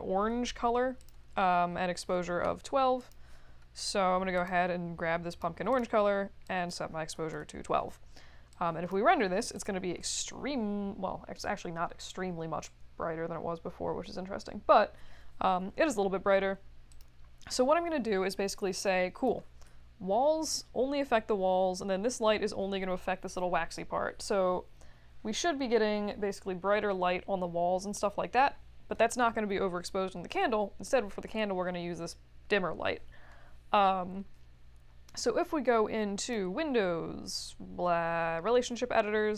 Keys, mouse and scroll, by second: 1.0 click, 3.0 click, 4.3 click, 5.3 click, 5.7 click, 6.4 click, 6.8-7.6 typing, 8.5 click, 9.5 click, 18.3 click, 36.2 click.